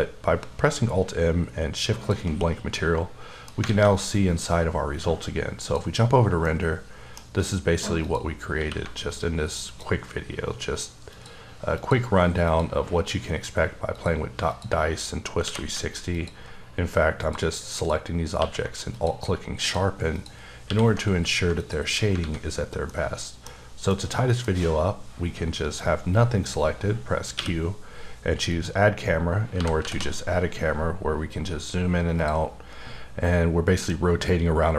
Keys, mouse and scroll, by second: 1.9 shift+click, 2.8 middle click, 3.7 alt+a, 5.6 click, 6.4 middle click, 8.0 click, 8.6 q, 9.7 alt+click, 11.8 click, 12.5 click, 13.9 click, 14.5 click, 15.4 q, 16.4 alt+click, 17.8 click, 18.4 q, 18.9 alt+click, 20.2 click, 20.7 q, 21.6 alt+click, 22.2 alt+a, 22.5-22.9 scroll down 1, 22.9 middle click, 23.9 middle click, 24.5-26.0 scroll down 1, 27.4 q, 28.5 click, 29.5 g, 29.8 z, 32.2 click, 33.1-34.0 scroll up 1.